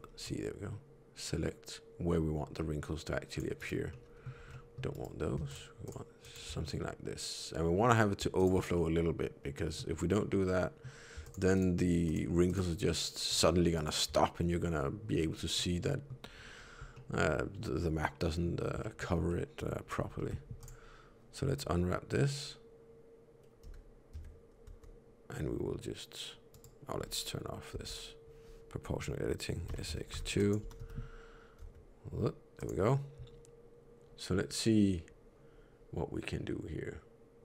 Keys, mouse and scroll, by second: 3.8 middle click, 4.3 c, 5.4 shift+click, 5.8 shift+click, 6.5 middle click, 8.3 shift+click, 8.6 middle click, 10.2 middle click, 11.1 shift+click, 11.4 shift+click, 13.2 shift+click, 15.5 middle click, 16.8 middle click, 18.7 shift+middle click, 19.2 middle click, 20.1 u, 27.7 o, 29.6 s, 30.5 g.